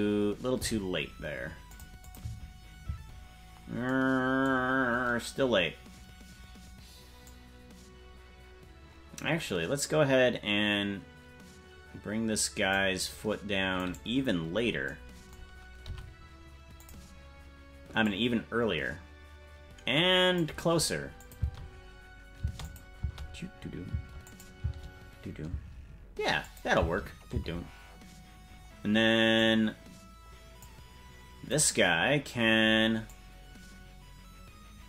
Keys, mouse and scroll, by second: 0.5 g, 2.0 click, 2.2 space, 3.8 space, 7.2-12.7 drag, 13.8-14.8 right drag, 15.8 g, 18.0-20.4 drag, 21.2 click, 21.4 space, 22.6 click, 22.6 space, 23.0 space, 24.2 click, 24.2 space, 24.6 space, 26.4 click, 26.4 space, 26.7 space, 27.5 space, 29.3-30.6 drag, 31.6 right click, 33.0-34.8 drag.